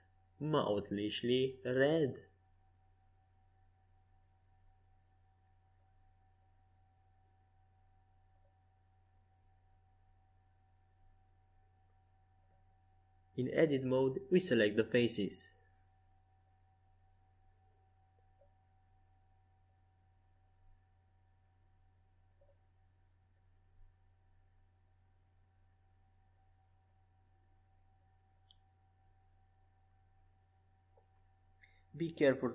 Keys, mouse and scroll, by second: 1.6 KP_5, 2.0 KP_1, 2.6 KP_3, 3.6 KP_5, 6.5 z, 8.0 a, 8.7 Tab, 9.5 Tab, 10.3 Tab, 11.1-12.4 drag, 11.3 Tab, 12.9 c, 16.6-21.4 drag, 18.3 c, 25.9-30.5 middle drag, 27.5 c, 30.8 middle click, 31.0-32.5 middle drag, 31.9 c.